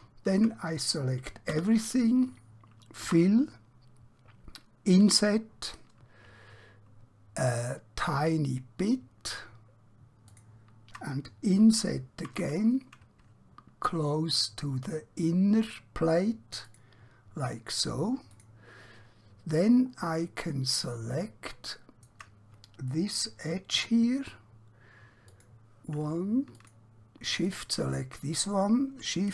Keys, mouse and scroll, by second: 3.0 typing, 10.3 shift+click, 16.6 shift+click, 18.4 click, 20.0-20.6 scroll up 1, 20.6 scroll down 1, 21.6 shift+middle click, 25.2 click, 26.6 shift+click.